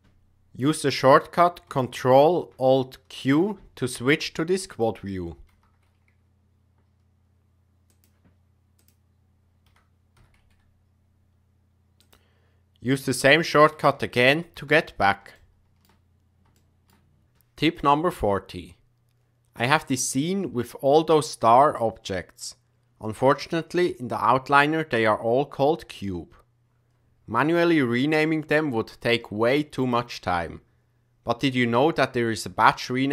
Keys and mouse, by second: 3.1 ctrl+alt+q, 5.4 g, 8.7 click, 9.7 g, 14.5 ctrl+alt+q, 15.3-15.9 shift+middle drag, 16.5 shift+middle click, 19.8-21.2 drag, 29.7 click.